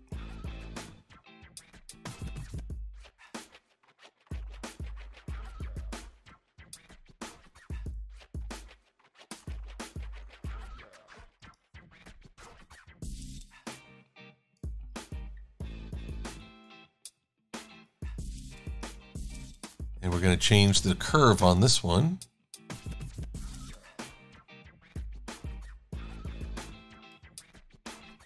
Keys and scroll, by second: 0.3 v, 10.3 shift+super+a, 15.0 v, 27.9 v.